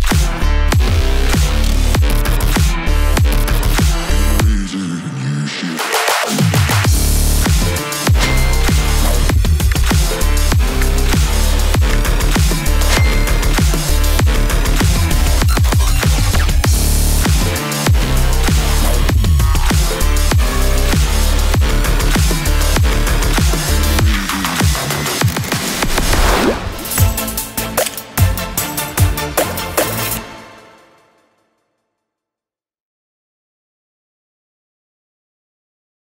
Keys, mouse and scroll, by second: 1.0 right click, 2.6 click, 5.1-8.1 drag, 8.1 n, 8.5 space.